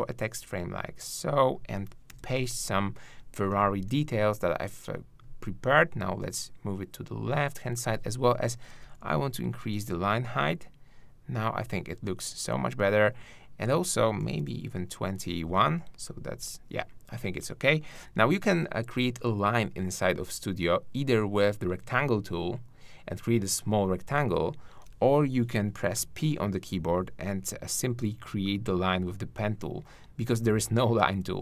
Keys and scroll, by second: 2.1 super+v, 3.5 super+a.